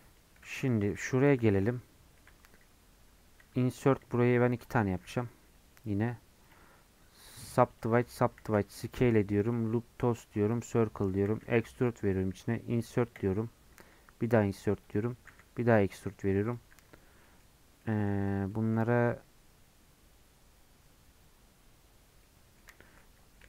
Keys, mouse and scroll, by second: 0.5 3, 0.7 click, 3.4 i, 5.0 middle click, 5.2 scroll up 1, 7.6 right click, 8.4 s, 10.6 right click, 10.9 middle click, 11.3 e, 17.2 middle click, 17.5 scroll up 2, 17.8-22.9 middle drag, 22.9 2.